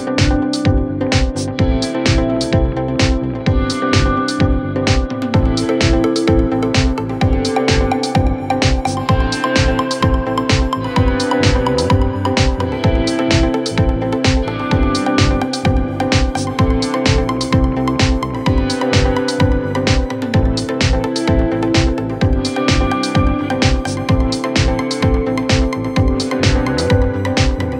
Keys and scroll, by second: 1.4 F3, 14.4 c, 18.7 Caps_Lock, 19.1 e, 21.3 c.